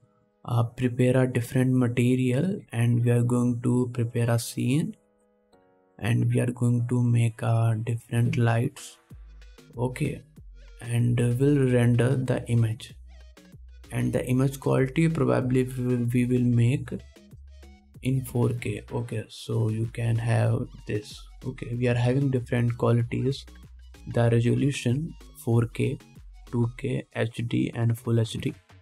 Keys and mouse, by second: 20.9 middle click, 22.2-28.8 drag, 22.2-28.8 middle drag, 22.2-28.8 right drag.